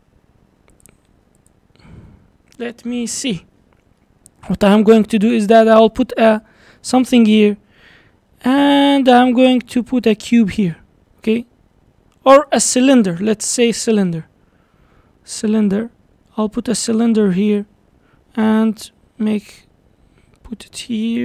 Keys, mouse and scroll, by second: 0.7 click, 1.4 shift+click, 4.0-5.0 middle drag, 5.0-5.7 scroll up 2, 5.7 shift+right click, 6.6 shift+a, 11.3 s, 13.0 Delete, 13.8 shift+a, 16.5 s, 17.8-18.5 scroll up 4, 18.6 g.